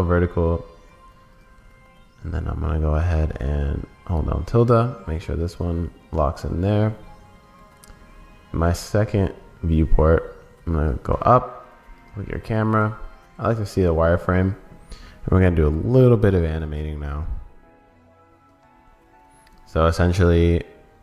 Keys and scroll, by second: 19.5 super+s.